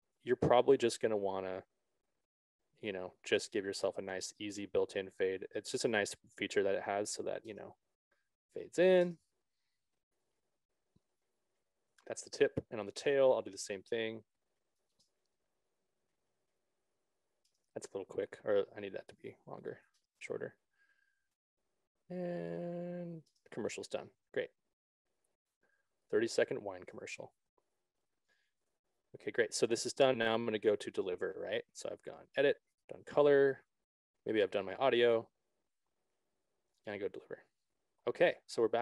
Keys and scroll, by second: 7.9 space, 10.3 ctrl+-, 12.2 ctrl+=, 15.4 space, 25.6 ctrl+-, 28.5 ctrl+s.